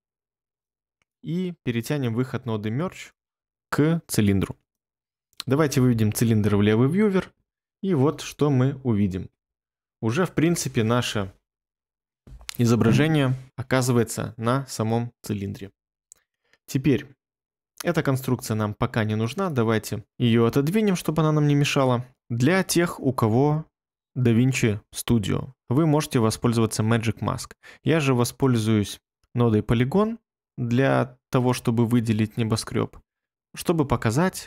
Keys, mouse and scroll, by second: 6.4 1, 7.6 ctrl+middle click, 7.7 ctrl+middle click.